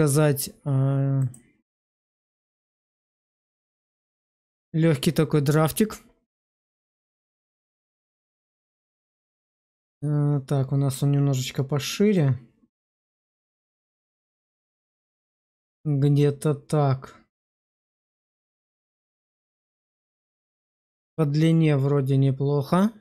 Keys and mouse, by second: 2.1-3.3 middle drag, 3.5 shift+middle click, 3.9-10.8 middle drag, 12.2-18.6 drag, 18.6-23.0 middle drag.